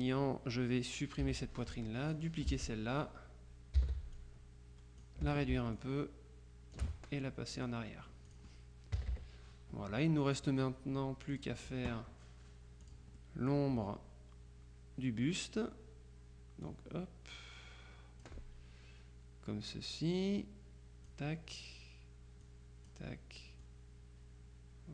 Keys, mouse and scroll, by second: 1.3 Delete, 2.1 click, 3.8 ctrl+d, 4.2-5.6 ctrl+drag, 5.8-7.3 ctrl+shift+drag, 7.9 click, 8.4 click, 9.1 Return, 10.0-11.0 drag, 11.0-11.4 scroll up 1, 11.4 click, 12.9 click, 13.5-14.0 scroll up 1, 14.0 scroll up 1, 16.7-18.8 drag, 20.0-21.6 drag, 22.5 click, 23.7-24.9 drag.